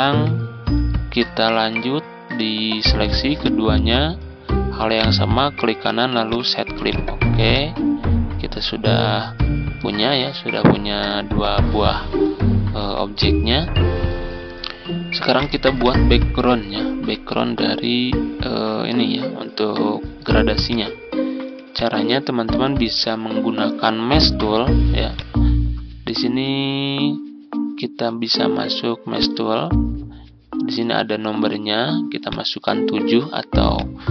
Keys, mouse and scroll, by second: 0.0 Up, 0.5 Left, 1.8-2.2 ctrl+scroll down 2, 3.2 shift+click, 4.9 right click, 6.2 click, 8.7 ctrl+scroll up 1, 10.1-10.6 ctrl+scroll down 2, 12.7 ctrl+z, 13.1 click, 16.2-16.8 ctrl+scroll down 2, 17.5-20.5 drag, 21.1-21.6 ctrl+scroll up 1, 21.6 click, 24.0-34.1 drag.